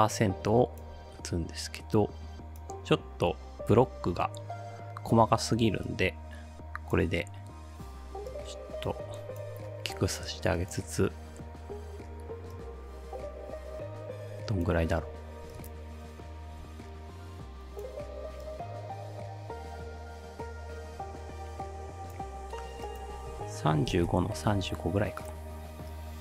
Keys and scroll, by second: 23.5-24.4 typing.